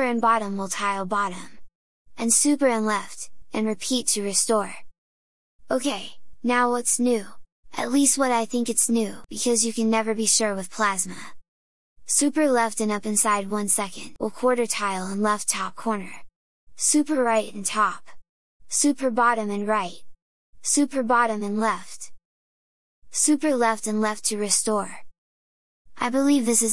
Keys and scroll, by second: 0.2 super+Down, 14.7 super+Left, 15.2 super+Up, 17.3 super+Right, 17.6 super+Up, 18.8 super+Down, 19.1 super+Right, 23.7 super+Left.